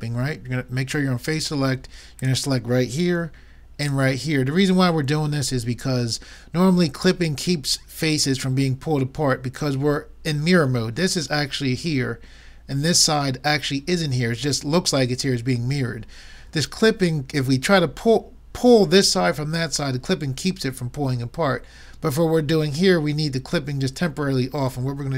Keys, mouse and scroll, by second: 2.2-5.7 drag.